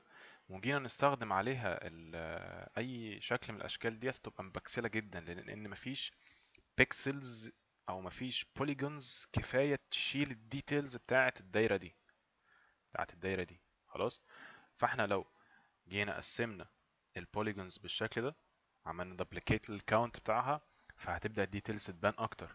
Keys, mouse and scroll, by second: 12.8 click.